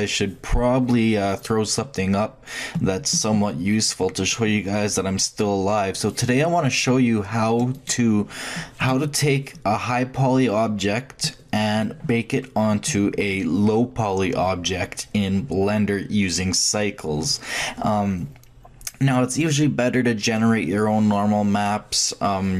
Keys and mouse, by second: 7.7-9.6 drag, 9.6-22.5 middle drag.